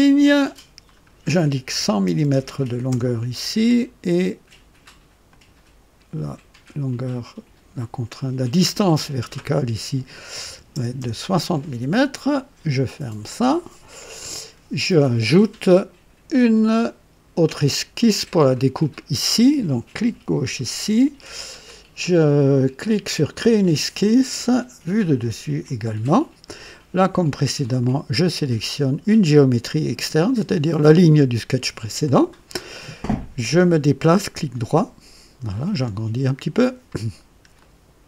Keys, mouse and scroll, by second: 0.2 click, 1.7-3.2 typing, 2.9 KP_Enter, 5.3 click, 8.6 click, 10.4 KP_6, 10.7 KP_0, 11.0 Return, 12.8 click, 17.7 click, 19.9 click, 23.1 click, 24.8 click, 25.6 click, 27.8 click, 30.2 click, 34.0-35.6 right drag, 35.8 scroll up 1, 37.2 scroll up 1, 37.6 right click.